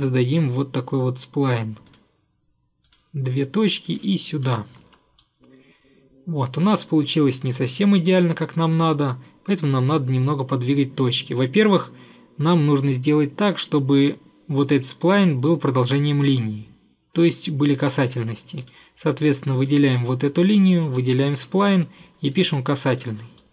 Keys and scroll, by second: 4.7 Escape, 4.9 Escape.